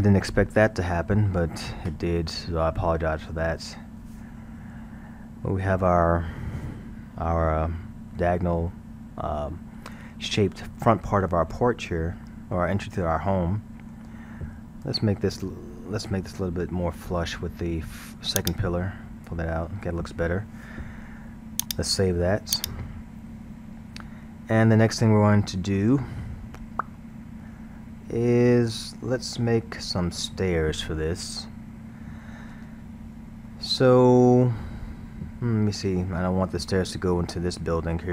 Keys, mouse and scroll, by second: 3.2 Tab, 3.7-6.7 middle drag, 7.4 scroll, 11.9-12.9 middle drag, 12.9-13.3 scroll, 13.3-14.8 middle drag, 16.1 Tab, 16.9-18.4 middle drag, 18.4-19.5 drag, 19.5 Tab, 20.0-21.6 middle drag, 21.6-23.8 drag, 23.8 scroll, 24.7-30.0 middle drag, 33.5-36.5 middle drag, 37.8-38.1 middle drag.